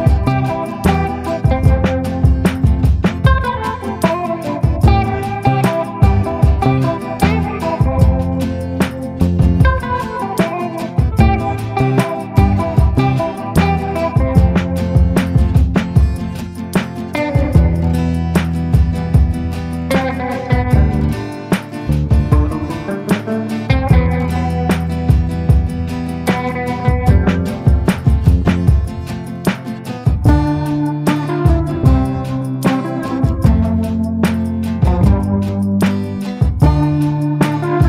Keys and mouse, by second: 2.8 click, 3.4 ctrl+z, 3.7 click, 4.3 click, 5.5 middle click, 7.5 click, 8.2 click, 8.9 ctrl+z, 9.3 click, 10.1 click, 10.8 ctrl+z, 11.2 click, 11.8 ctrl+z, 12.1 click, 13.0 ctrl+z, 13.2 click, 13.6 ctrl+z, 13.8 click, 14.4 ctrl+z, 14.6 click, 15.9 click, 17.0 click, 17.5 click, 20.2 click, 20.9 ctrl+z, 21.4 click, 21.9 click, 22.7 ctrl+z, 23.1 click, 23.6 click, 24.3 ctrl+z, 24.3 click, 24.9 click, 25.3 ctrl+z, 25.8 click, 26.4 click, 27.0 ctrl+z, 27.4 click, 27.8 ctrl+z, 28.0-29.3 drag, 30.2 click, 30.9 ctrl+z, 30.9 click, 32.8 click, 33.6 click, 34.3 ctrl+z, 34.5 ctrl+z, 35.4 click, 36.0 click, 36.7 ctrl+z, 36.9 ctrl+z, 37.2 click, 37.7 click.